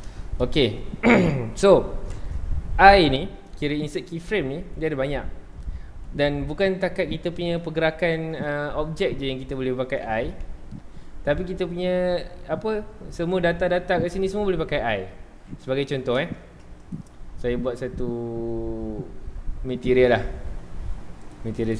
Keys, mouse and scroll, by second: 0.2-7.4 shift+middle drag, 7.4-10.4 drag, 10.4 i, 16.9-20.0 drag, 21.2 click.